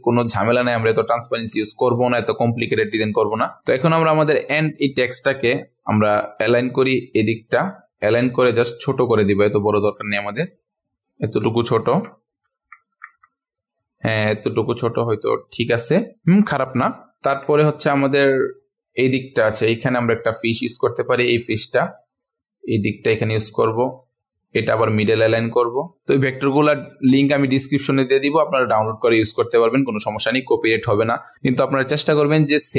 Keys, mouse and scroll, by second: 1.2 ctrl+alt+scroll up 1, 1.7 click, 3.4 shift+click, 3.6 ctrl+alt+scroll up 1, 3.9-4.7 ctrl+alt+scroll down 1, 4.7 click, 5.6 shift+click, 6.2 click, 8.2 ctrl+alt+scroll up 1, 8.7 click, 10.0 shift+click, 11.8 ctrl+alt+scroll down 1, 13.6 click, 14.4-16.1 ctrl+alt+scroll down 1, 17.1-17.6 ctrl+alt+scroll down 2, 17.6 scroll up 1, 17.6-18.6 scroll down 1, 18.6-20.8 drag, 21.2 ctrl+alt+scroll up 1, 21.6-25.7 drag, 26.5 shift+click, 27.0 click, 28.7 ctrl+alt+scroll down 1, 30.4-31.7 ctrl+alt+scroll down 1, 31.7-32.7 scroll down 1.